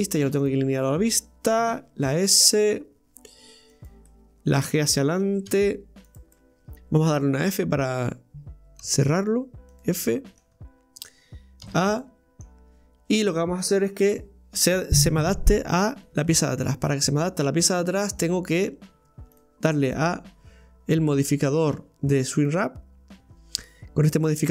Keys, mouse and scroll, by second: 1.7 s, 4.1-5.5 middle drag, 5.5 g, 6.3 middle click, 6.7 Tab, 10.1 middle click, 10.5-11.7 scroll up 3, 11.7 a, 12.0-17.7 middle drag, 17.7 Tab, 22.5-24.5 drag.